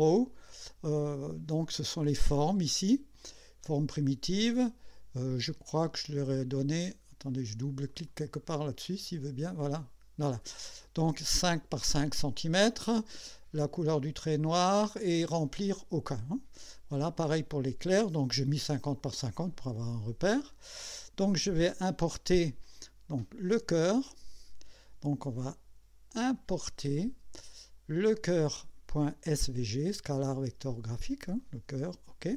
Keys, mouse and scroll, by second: 6.0 click, 6.7 click, 7.9 click, 8.8 click, 9.6 click, 20.5 click, 21.6 click, 24.0 click, 26.4 click, 31.4 click.